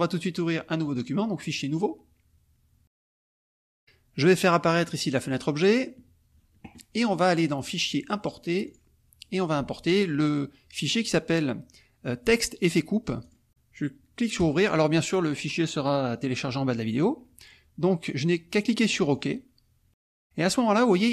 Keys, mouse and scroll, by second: 0.9 click, 1.4 click, 4.9 click, 5.3 click, 7.6 click, 8.7 click, 13.2 click, 14.3 click, 19.1 click.